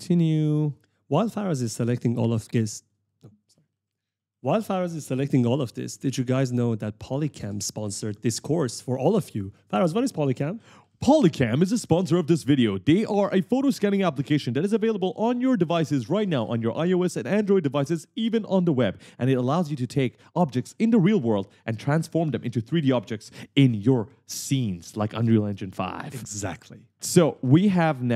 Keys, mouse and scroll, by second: 0.4 shift+right click, 0.8 shift+click, 1.5 right click, 2.2 shift+click, 3.2 right click, 3.6 w, 4.3 w, 4.6 a, 5.7 shift+click, 6.3 right click, 7.1 shift+click, 7.7 right click, 8.4 shift+click, 9.7 right click, 9.8-12.4 typing, 14.2 shift+click, 14.9 right click, 15.9 shift+click, 16.9 right click, 17.9 shift+click, 20.5-22.0 typing, 20.6 right click, 27.3 right click, 27.9 s.